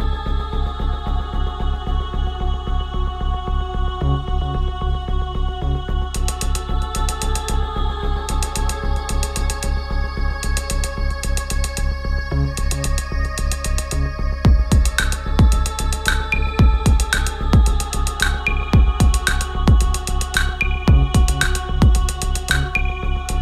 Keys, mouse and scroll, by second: 13.4 shift+Down, 14.5 click, 15.0 shift+Down, 16.3-20.4 drag, 23.1 click.